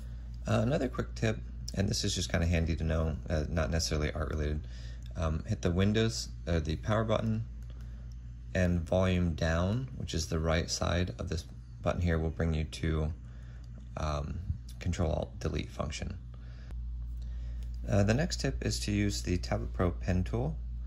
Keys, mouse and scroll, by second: 13.6 ctrl+Delete.